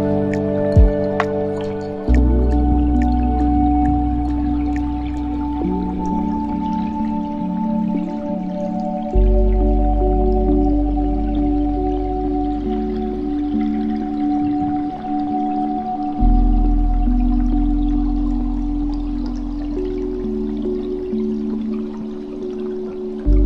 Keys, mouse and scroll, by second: 3.2-6.4 drag, 7.2-10.3 drag, 12.4 scroll down 1, 15.4-18.3 middle drag, 19.0-22.0 drag.